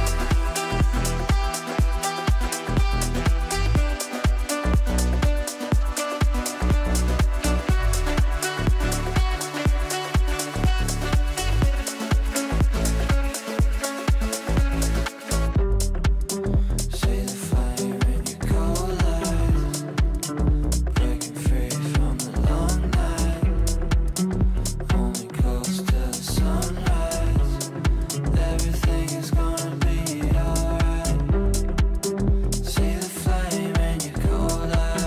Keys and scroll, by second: 3.9 shift+Page_Up.